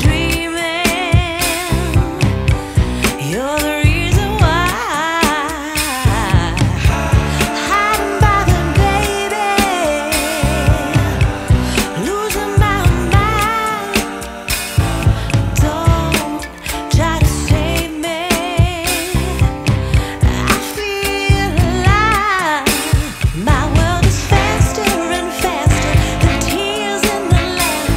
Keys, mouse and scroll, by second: 0.5 click, 1.4 middle click, 1.9-3.1 scroll up 1, 3.1-5.0 drag, 5.0-7.3 middle drag, 7.3-8.8 shift+drag, 8.8 Delete, 10.1-11.6 middle drag, 11.6 ctrl+s, 11.9 Tab, 13.1 click, 13.8-15.9 middle drag, 15.9 click, 19.2 click, 20.7-24.1 drag, 24.1-25.1 middle drag, 25.1-26.5 scroll up 3, 26.5-27.9 drag.